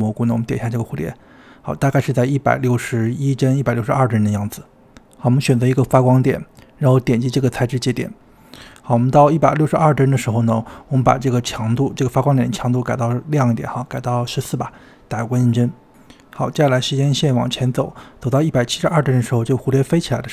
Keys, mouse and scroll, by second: 0.7 click, 4.3 click, 6.2 click, 11.6-12.8 drag, 13.0 click, 14.5 click, 17.1-18.9 drag, 19.4 click.